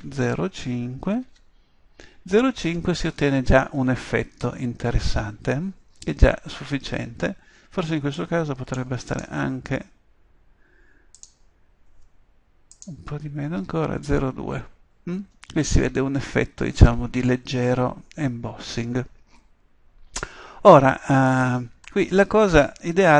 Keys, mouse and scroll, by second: 11.1 click, 14.6-15.7 drag, 17.8-19.5 middle drag, 22.5-23.1 middle drag.